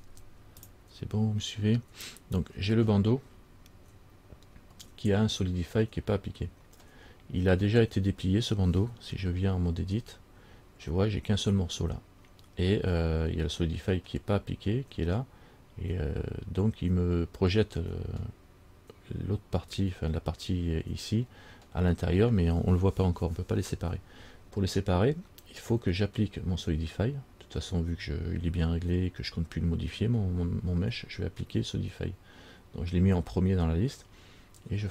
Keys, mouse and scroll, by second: 9.3 Tab.